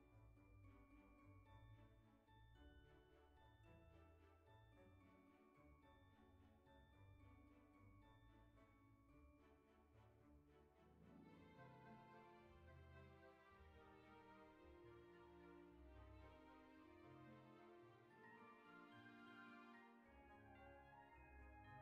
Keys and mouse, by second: 0.0 middle click, 2.3 middle click, 3.4 KP_1, 4.5 middle click, 6.1 Tab, 6.9 shift+middle click, 8.2 click, 9.6 alt+shift+click, 10.4 right click, 11.7 click, 13.4 s, 14.8 click, 15.1 g, 16.6 click, 17.9 Tab, 19.7 middle click, 20.6 click, 21.4 alt+z.